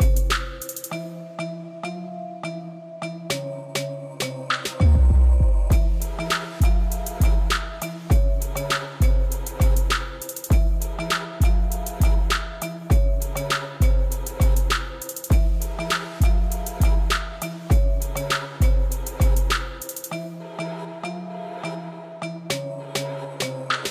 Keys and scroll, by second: 2.0 x, 5.3 Tab, 13.0 Tab, 17.0 1, 17.4 shift+z, 22.3 x.